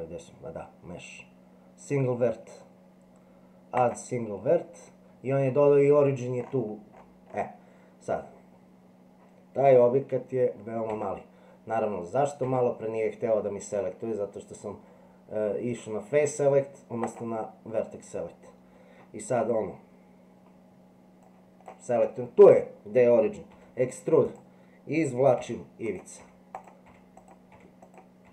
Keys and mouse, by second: 10.9 Tab, 12.4 Tab, 17.0 click, 21.4 click, 23.5 e, 25.4-28.3 e.